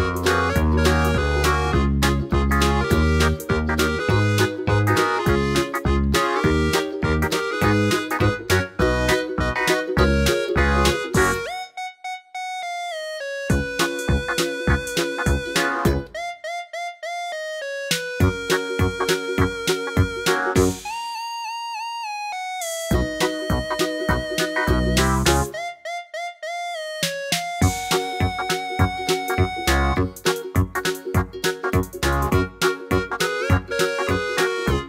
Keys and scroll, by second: 25.3 Tab, 25.5 Right, 26.1 Tab, 26.5 Tab, 30.5 d.